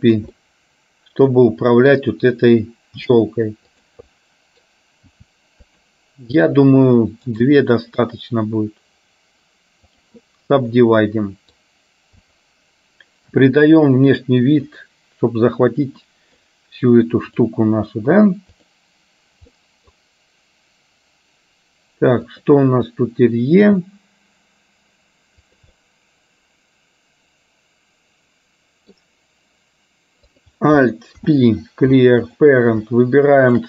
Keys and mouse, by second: 0.5-2.0 middle drag, 3.1 g, 4.1 middle click, 5.1 g, 6.5 click, 7.6-10.1 right drag, 10.5-11.6 middle drag, 12.2 click, 13.4 g, 16.1 middle click, 17.5 click, 19.5 middle click, 22.4 click, 25.7-29.0 middle drag, 30.4 click, 31.2 alt+p.